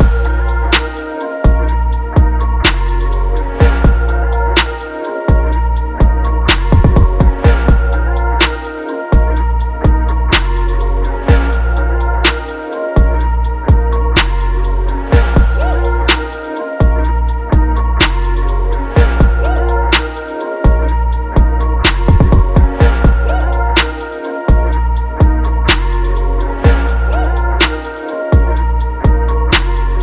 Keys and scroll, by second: 0.8-3.7 typing, 3.9 ctrl+t, 4.3 ctrl+t, 14.1 Return, 14.4 ctrl+t, 18.3 Return, 21.8 ctrl+t, 22.4 ctrl+KP_Add.